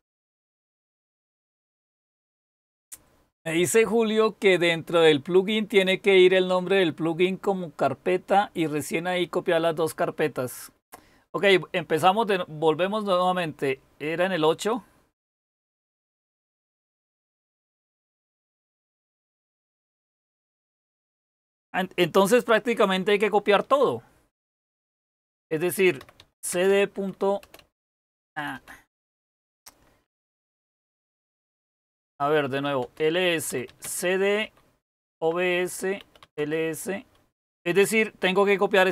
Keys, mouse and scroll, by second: 24.4-28.6 typing, 30.2-35.1 typing, 36.2 typing.